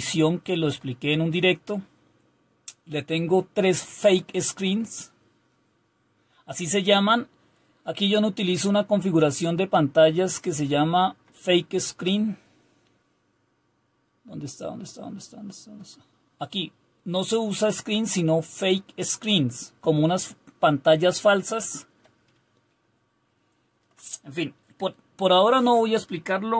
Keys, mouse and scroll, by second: 0.0-1.5 Down, 1.5 Up, 2.1 Up, 2.4-11.8 Up, 11.8 Down, 12.5 Down, 12.6 Down, 12.6 Down, 13.1-15.7 Down, 21.4-21.9 Up, 22.3-23.3 Down.